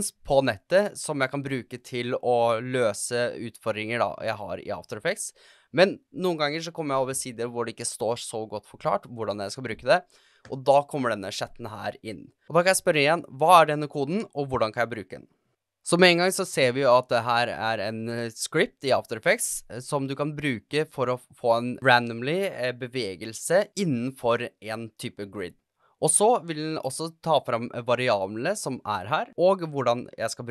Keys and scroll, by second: 12.6 shift+Return, 12.8 super+v, 13.3 Return.